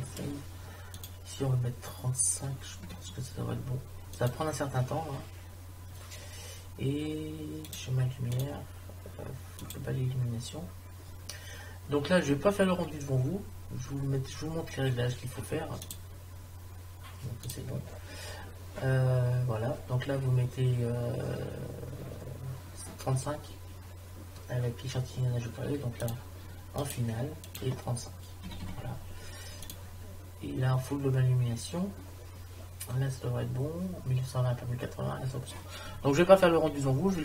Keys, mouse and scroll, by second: 10.4-15.8 middle drag, 15.8-18.1 drag, 18.7-25.2 middle drag, 26.0-29.1 drag, 30.5-35.6 middle drag.